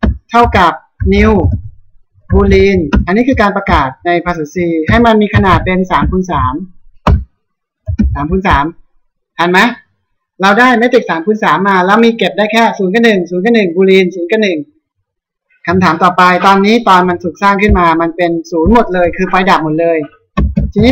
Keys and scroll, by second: 2.5 Tab, 6.6 Return, 8.0 ctrl+s, 19.9 Return, 20.8 Up.